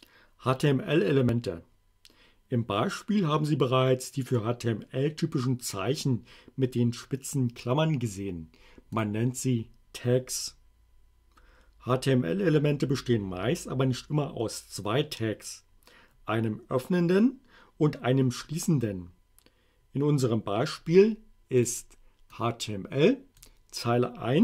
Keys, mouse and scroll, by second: 9.0 click, 21.6 click, 22.4-23.6 drag.